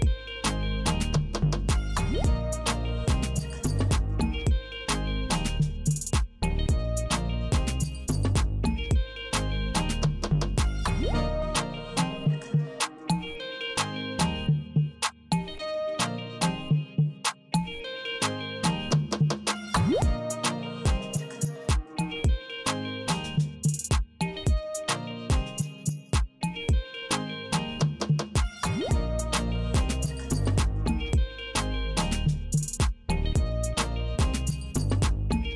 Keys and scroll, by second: 0.5 alt+F4, 7.2 Return, 11.9 space, 16.7 Return, 34.8 super+x.